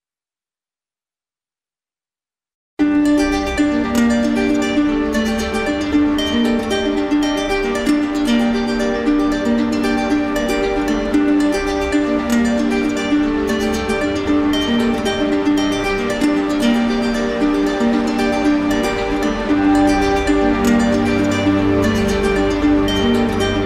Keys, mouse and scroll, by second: 0.6 click, 0.9 click, 1.4 shift+click, 4.2 click, 4.9 click, 6.2 shift+click, 8.2 click, 9.5 click, 11.9 click, 12.5 shift+click, 13.8 click, 14.8 click, 16.6 click, 18.6 shift+click, 19.2 click, 21.4 click, 22.6 click, 22.9 shift+click, 23.5 alt+click.